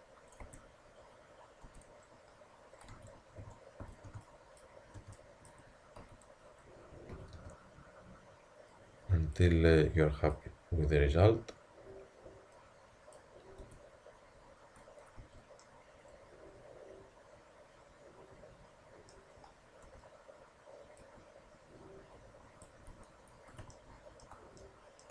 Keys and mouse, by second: 0.4 Tab, 1.7 Tab, 2.9-5.0 typing, 6.0 z, 7.1 s, 10.3-12.1 drag, 13.7 Tab, 14.1-16.6 drag, 15.2 a, 16.6-17.5 middle drag, 19.9 Tab, 21.0-22.9 drag, 22.9 Tab, 23.7 click.